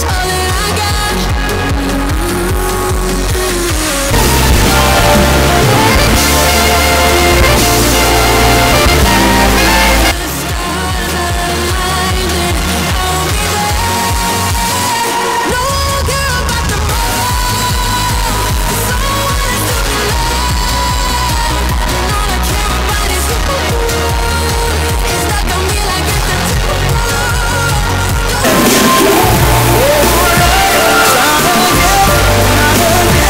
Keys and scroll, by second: 11.0 Page_Down.